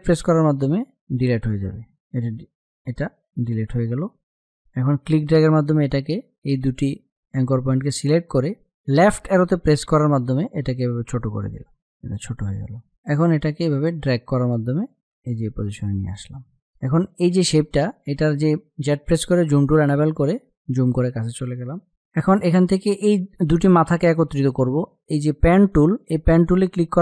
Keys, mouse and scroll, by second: 1.3 click, 1.6 Delete, 4.2-8.8 drag, 9.1 Left, 11.6-18.3 drag, 25.8 click.